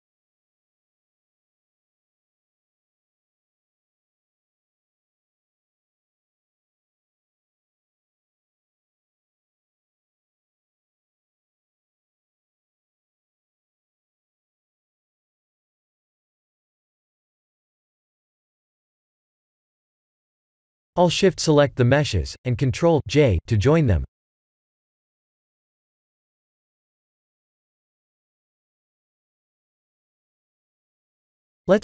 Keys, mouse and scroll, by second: 2.5 click, 3.2 s, 4.3 click, 5.7 KP_0, 7.7 middle click, 9.4 shift+`, 12.2 ctrl+alt+KP_0, 12.9 shift+`, 14.4-15.3 a, 15.5 a, 15.9 a, 19.5 click, 21.1 click, 21.9 shift+click, 23.5 ctrl+j, 26.2 click, 27.4 click, 28.6 click, 29.4 click.